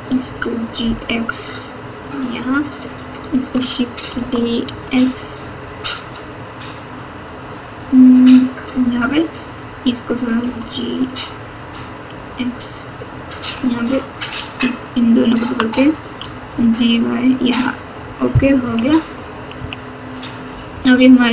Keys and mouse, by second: 0.2 g, 2.6 middle click, 4.2 shift+d, 9.4 click, 10.4 g, 16.1 g, 17.7 click, 18.6-21.3 typing.